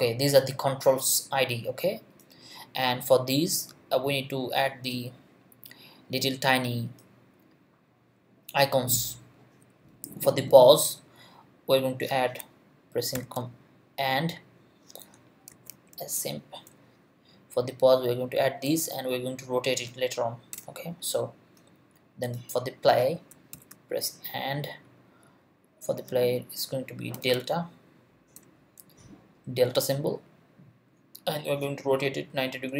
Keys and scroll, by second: 13.1 shift+7, 15.3-16.4 typing, 20.5 Return, 23.5 shift+7, 26.9-28.3 typing.